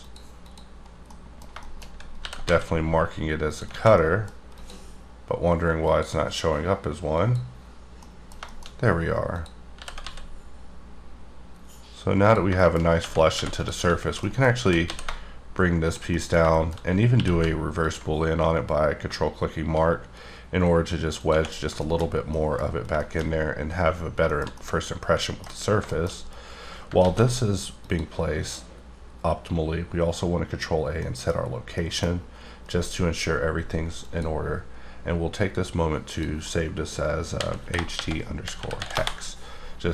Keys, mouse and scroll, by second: 0.0 click, 0.4 click, 1.1 middle click, 1.8 scroll up 2, 2.1 g, 2.4 z, 3.4 click, 3.7 alt+a, 3.9 middle click, 4.5 click, 5.8 click, 7.2 click, 8.0 middle click, 9.3 click, 9.8 g, 10.0 z, 12.2 click, 12.6 shift+middle click, 13.0 Tab, 13.4 3, 13.5 click, 14.3 middle click, 14.6 g, 14.8 z, 15.9 shift+click, 16.1 shift+middle click, 16.7-17.1 scroll up 5, 17.1 q, 17.7 ctrl+click, 21.2 click, 21.5-22.1 scroll down 5, 21.8 shift+middle click, 22.3 middle click, 22.7 scroll up 2, 23.0 shift+middle click, 23.9 scroll down 2, 24.4 shift+middle click, 25.5 scroll up 3, 25.8 shift+middle click, 27.0 ctrl+a, 27.7 click, 29.7-30.8 scroll up 4, 30.8 scroll down 1, 30.9 middle click, 31.3 scroll down 1, 31.8 middle click, 32.0 scroll down 3, 34.3 click, 36.1 click, 37.4-38.9 typing.